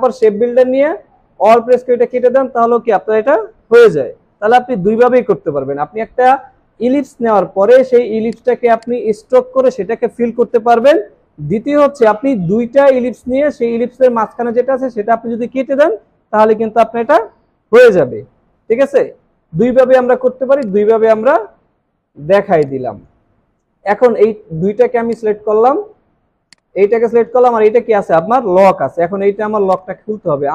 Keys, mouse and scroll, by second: 1.7 alt+click, 8.8 double click, 22.1 Delete, 25.1 shift+click.